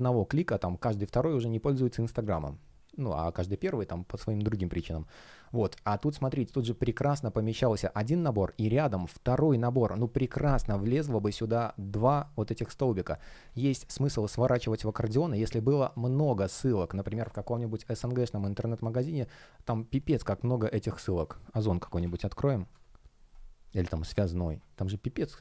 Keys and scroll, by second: 22.6 Return.